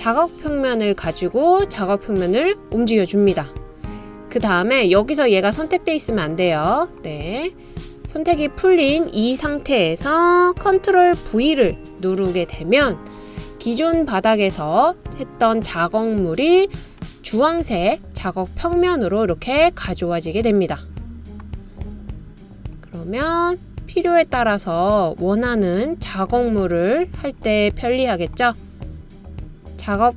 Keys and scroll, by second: 12.6 super+v.